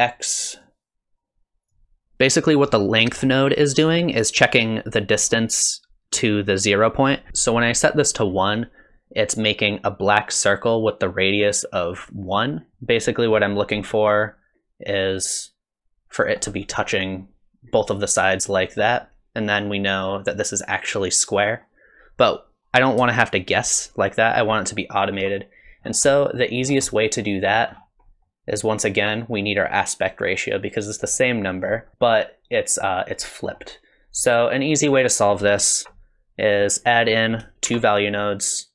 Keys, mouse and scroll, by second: 0.6 click, 2.0 shift+middle click, 2.0 scroll up 3, 2.7 middle click, 7.1 middle click, 12.7 middle click, 14.0 shift+click, 23.1 shift+click, 25.8 scroll down 4, 26.3 middle click, 26.6 scroll down 2, 26.9 middle click, 27.7-28.2 scroll up 6, 28.2 middle click, 31.1 middle click, 31.9 scroll down 5, 33.3 middle click, 34.3 click, 35.1 click, 36.6 click, 37.0 click, 37.7 shift+d.